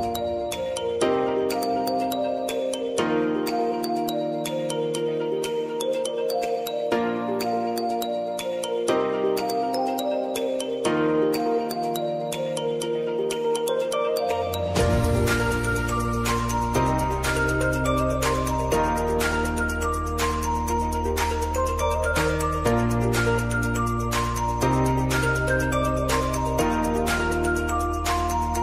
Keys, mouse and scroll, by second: 2.8 s, 3.3-7.1 drag, 8.5 Return, 10.3 click, 11.6 Return, 12.2 Return, 12.6 Left, 15.0-21.8 drag, 21.8 p, 22.4-26.2 drag, 26.9 t, 27.6 click.